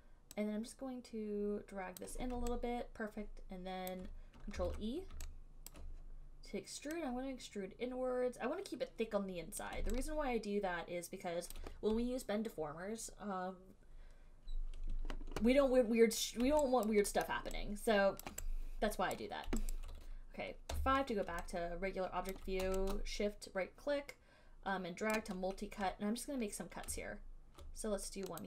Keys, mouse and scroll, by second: 2.2 click, 4.2 alt+click, 4.8 ctrl+e, 6.0 alt+click, 9.9 click, 11.2 click, 11.7 alt+click, 17.1 alt+click, 17.5 alt+right click, 17.5 alt+middle click, 18.5 alt+click, 19.4 right click, 21.0 5, 22.5 alt+right click, 25.3 right click.